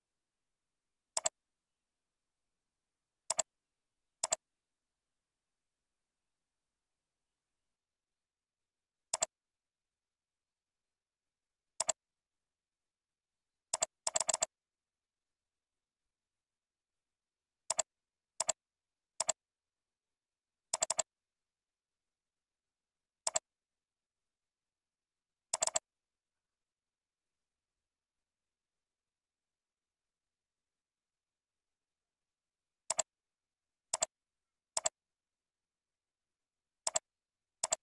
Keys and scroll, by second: 13.2 ctrl+e, 17.2 ctrl+b, 25.2 ctrl+z, 34.5 ctrl+c, 35.2 ctrl+v, 36.1 ctrl+r.